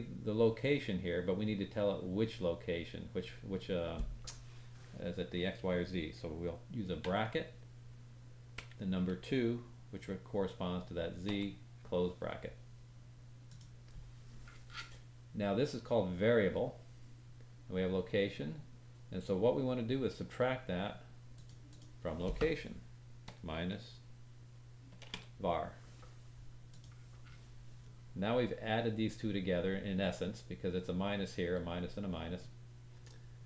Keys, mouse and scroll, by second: 21.6-33.4 drag.